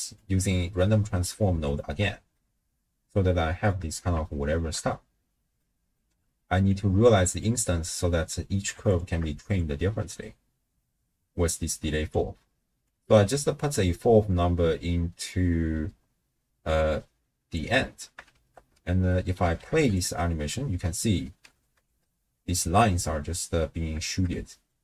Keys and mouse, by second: 0.2-1.3 drag, 1.6 alt+shift+click, 2.5-3.7 middle drag, 4.3 shift+middle drag, 5.6 middle click, 6.7 click, 8.9 alt+shift+click, 9.6-12.1 drag, 12.9-17.6 drag, 18.3 shift+space, 19.4 a, 19.7 x, 20.3 space, 21.5 space, 22.2 space, 22.9 space, 23.2-23.9 drag, 24.1 shift+space, 24.6 middle click.